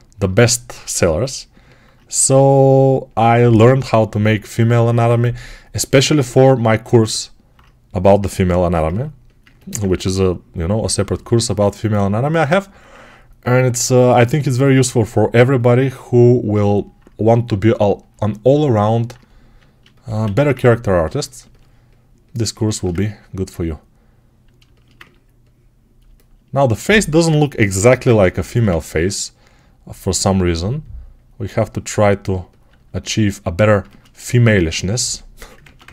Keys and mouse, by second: 20.1 1, 21.3-35.9 ctrl+alt+right drag, 26.7 alt+q, 27.6 g.